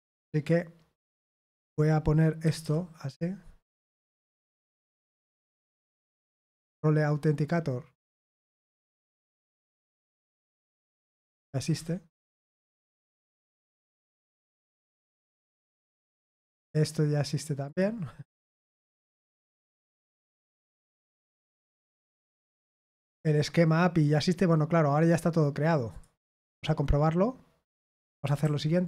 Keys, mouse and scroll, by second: 0.1 click, 2.4 typing, 4.1 click, 7.3-8.2 scroll down 2, 10.3 click, 11.5 typing, 13.6 click, 17.6 click, 18.8 typing, 21.0 click, 24.9 click, 25.9 click, 28.0 ctrl+click, 28.4 ctrl+a.